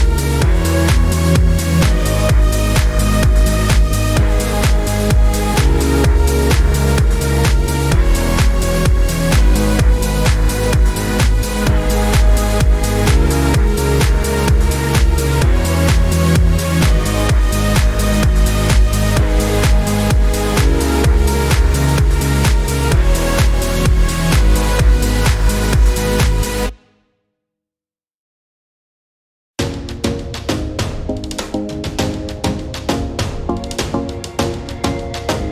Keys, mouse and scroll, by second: 0.7 click, 1.6-2.1 drag, 2.1 drag, 2.6 ctrl+shift+g, 2.8 click, 3.0 click, 3.4 shift+click, 3.5 click, 3.9 click, 4.5 Delete, 4.6 click, 4.8 Delete, 5.7 click, 6.3 click, 6.6 click, 7.0-8.1 drag, 8.2 click, 8.5 right drag, 8.8 drag, 9.1 shift+click, 9.8 click, 10.1 ctrl+d, 10.6 shift+click, 10.8 click, 11.0 click, 11.1 click, 11.3 shift+click, 11.5 drag, 11.6 click, 11.9 click, 12.0 click, 12.2 -, 12.3 click, 12.5 click, 12.7 click, 12.9 click, 13.1 click, 13.3 click, 13.8 click, 14.0 click, 14.5 click, 14.8 click, 15.0 -, 15.1 drag, 15.4 click, 15.8 shift+click, 15.9 click, 16.2 click, 16.3 click, 16.7 click, 17.1 click, 17.2 click, 17.7 click, 18.1 click, 18.3 click, 18.8 click, 19.6 middle click, 19.9 click, 20.5 -, 20.6 middle click, 20.9 middle drag, 21.1 click, 21.2 click, 21.5 click, 21.7 click, 21.8 click, 22.2 click, 23.0 click, 23.2 click, 23.5 click, 23.7 click, 23.9 -, 23.9 drag, 24.0 click, 24.3 click, 24.7 click, 24.9 click, 25.3 click, 26.0 click, 26.5 click, 27.1 click, 27.6 click, 28.0 click, 28.3 click, 28.6 click, 28.8 click, 29.0 click, 29.3 click, 29.8 click, 30.0 click, 30.2 click, 30.6 click, 31.0 click, 31.1 click, 31.4 click, 32.4 click, 32.9 click, 33.0 click, 33.6-35.0 typing, 34.1 click, 34.6 middle click, 34.8 middle click, 35.0 click.